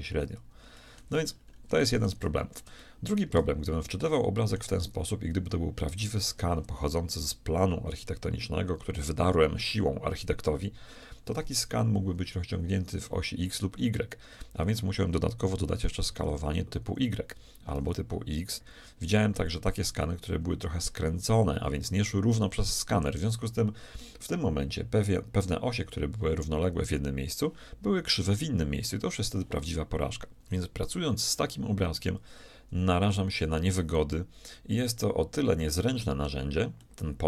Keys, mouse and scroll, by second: 15.9 s, 18.2 s, 36.8 middle click.